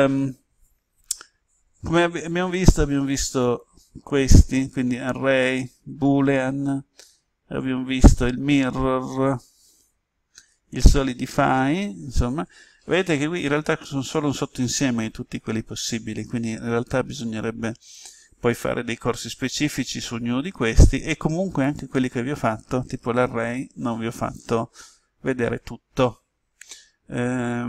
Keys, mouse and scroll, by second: 3.4-4.4 drag.